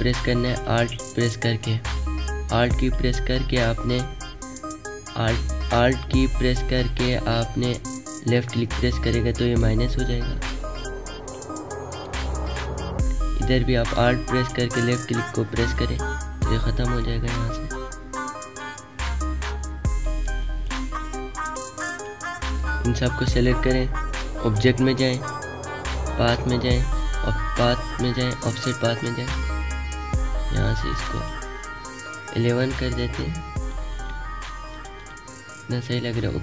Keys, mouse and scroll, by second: 20.4 click, 20.5-24.0 drag.